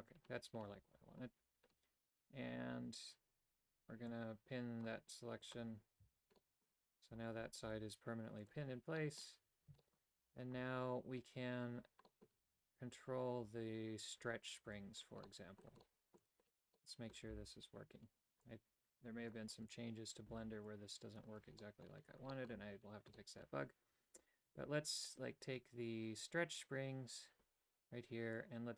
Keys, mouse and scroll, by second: 4.1 click, 5.4 click, 6.0 a, 6.4 middle click, 7.3 alt+right click, 7.6 g, 9.0 middle click, 9.8 shift+middle click, 11.4 typing, 12.1 middle click, 14.7 a, 15.3 middle click, 15.9 shift+middle click, 16.8 middle click, 17.3 c, 20.3 c, 21.6 middle click, 22.3 shift+middle click, 23.2 shift+middle click, 28.4-28.7 drag.